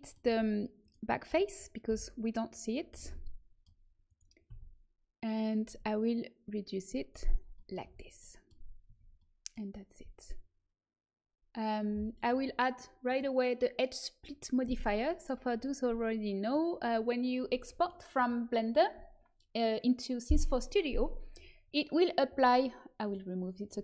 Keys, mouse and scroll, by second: 0.3 z, 0.7-1.8 drag, 0.7-1.8 right drag, 1.8 Delete, 4.0-5.7 right drag, 4.4 z, 5.7-7.0 drag, 7.3 middle click, 7.7 a, 8.8 Tab, 12.1-14.9 drag, 16.2-23.0 middle drag, 23.0 click.